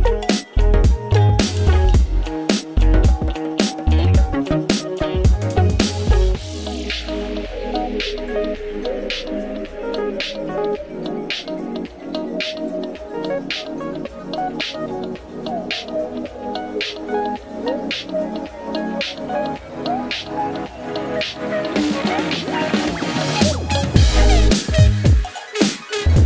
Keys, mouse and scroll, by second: 10.3-20.7 drag, 21.3 click, 23.3 click.